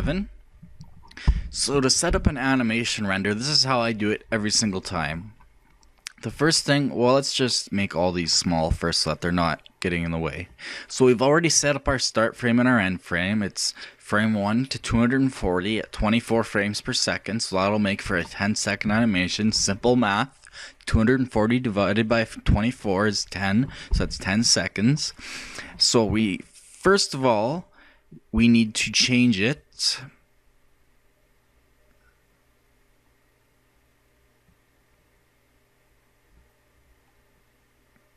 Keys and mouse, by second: 0.0 F11, 7.1-10.2 drag.